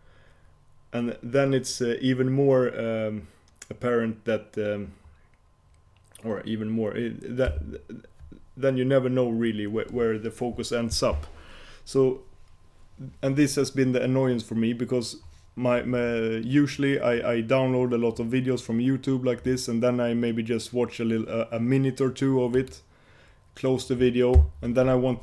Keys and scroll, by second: 7.6 F4.